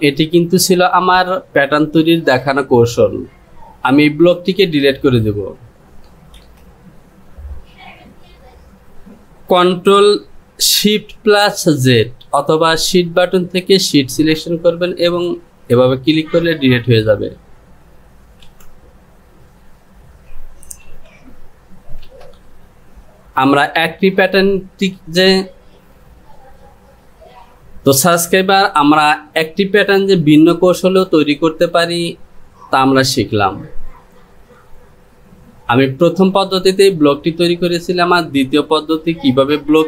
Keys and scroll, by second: 22.2 Return.